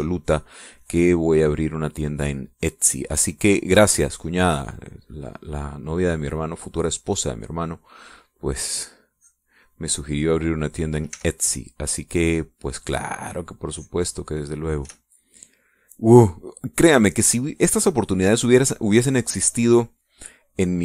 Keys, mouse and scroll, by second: 0.5 click, 1.5 click, 2.8-4.1 drag, 4.7 click, 6.9-10.8 drag, 11.9 e, 12.0-15.6 drag, 15.6 e, 16.2 middle click, 16.7 middle click, 17.4 middle click, 18.0 click, 18.5 click, 19.1 click, 19.9 middle click.